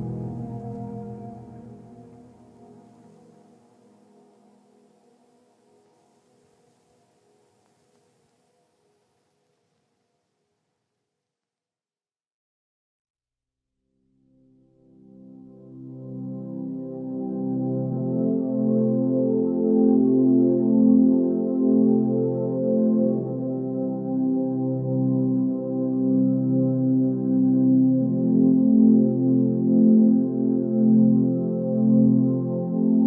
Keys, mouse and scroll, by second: 6.6 ctrl+space, 20.6 ctrl+space, 22.6 click, 23.0 ctrl+space.